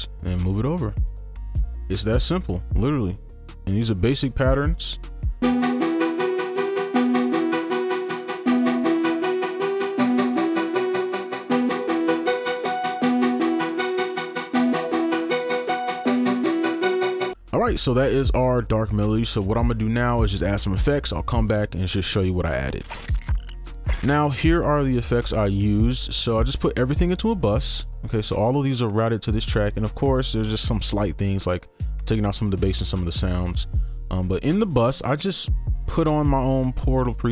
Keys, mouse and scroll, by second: 0.5 shift+click, 1.2 right click, 1.6-2.0 scroll down 1, 2.0-2.4 scroll up 1, 3.3 scroll down 1, 4.1 right click, 4.6 double click, 5.4 space, 17.3 space, 26.7 ctrl+click.